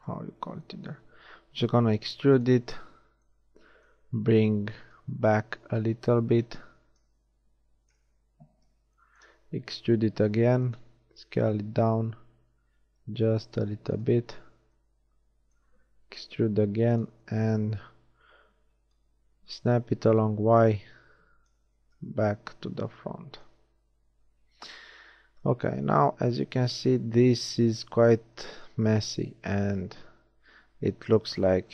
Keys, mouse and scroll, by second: 2.0 e, 4.9-7.0 drag, 8.0 KP_1, 8.5 z, 10.3 e, 10.5 click, 12.0 s, 14.3 z, 16.6 e, 18.9-21.0 drag, 21.9 z, 24.6 Tab.